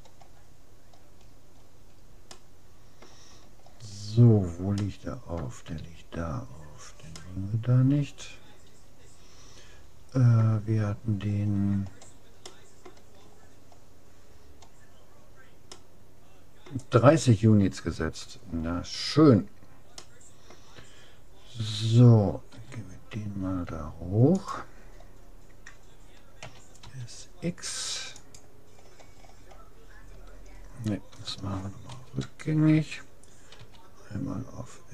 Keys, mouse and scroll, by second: 0.8-1.7 scroll down 1, 2.3-4.9 middle drag, 6.5 middle click, 8.1 middle click, 11.3-12.5 middle drag, 12.5-14.1 scroll up 1, 14.1-17.5 middle drag, 17.9-20.1 middle drag, 20.9 middle click, 22.5 g, 26.4 s, 28.9-31.3 middle drag, 31.9 ctrl+z, 33.7 s.